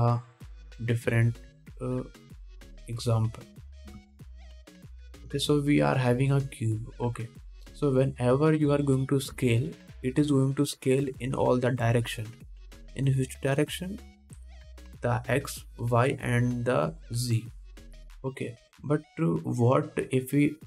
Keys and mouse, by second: 1.0 shift+a, 5.1 g, 6.2 s, 10.6 s.